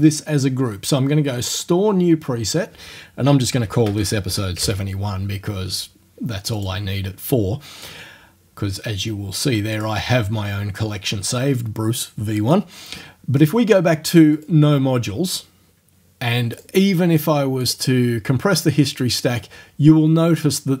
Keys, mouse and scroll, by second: 1.5 click, 3.3-5.1 typing, 6.6 click, 9.8 click, 14.4 click, 16.6 click, 17.7 click.